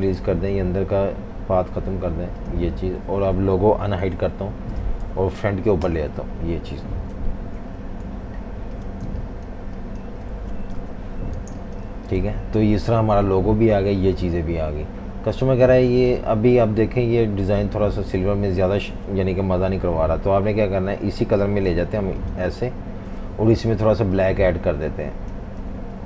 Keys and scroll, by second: 4.0 alt+super+3, 5.8 shift+super+], 7.1 super+-, 7.3 super+-, 7.4 super+-, 8.1-10.1 typing, 10.8 super+-, 11.3 typing, 17.9 super+z, 21.6 i, 25.7-26.0 typing.